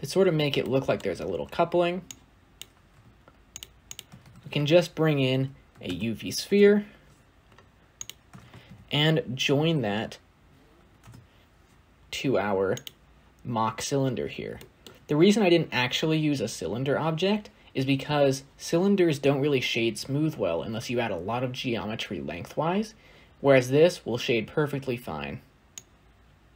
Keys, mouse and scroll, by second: 2.8-3.4 scroll up 1, 6.3 shift+a, 10.8 shift+a.